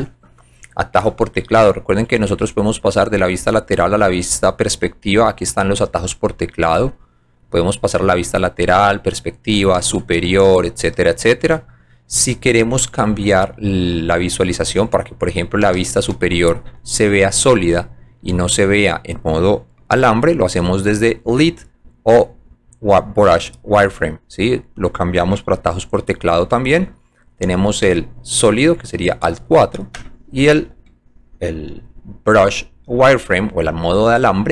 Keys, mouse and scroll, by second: 1.7 click, 6.7 click, 7.8 alt+right click, 8.6 alt+click, 9.7 alt+j, 10.3 alt+c, 13.3 alt+right click, 15.6 alt+j, 16.0 scroll down 2, 16.7 right click, 18.0 alt+middle click, 18.3 alt+right click, 20.8 click, 23.8 click, 27.9 alt+4, 30.7 alt+2.